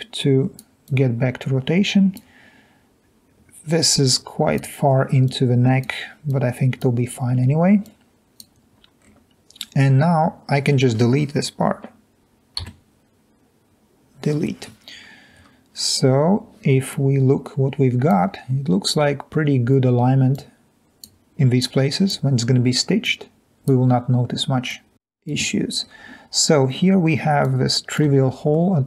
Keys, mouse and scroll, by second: 0.9-1.5 drag, 4.1 click, 5.3-5.7 drag, 6.5 click, 8.3 click, 8.7 scroll up 2, 9.0-9.8 scroll down 2, 12.7 Delete, 14.9-15.2 scroll down 2, 15.2 scroll up 1, 15.4-16.2 scroll down 1, 17.1-17.5 drag.